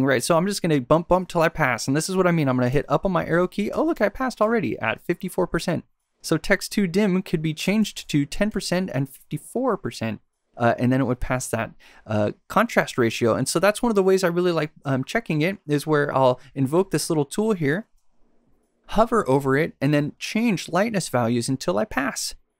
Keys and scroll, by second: 2.7 Up, 3.7 Down, 4.4 Up, 7.6 Left, 8.5 Right.